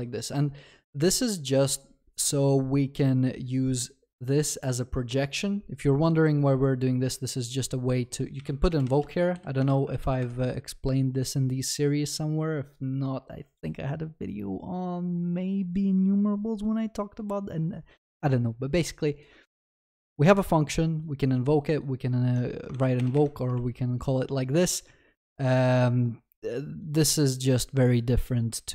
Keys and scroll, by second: 9.6 Return, 9.9 ctrl+s, 23.0 ctrl+BackSpace.